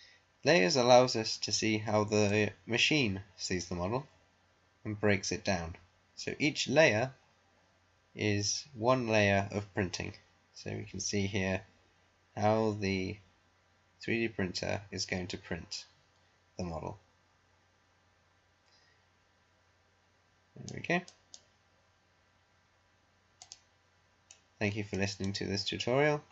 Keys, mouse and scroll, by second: 2.4-12.2 drag, 21.4 click, 23.4 click, 24.2 middle click, 25.2 right click.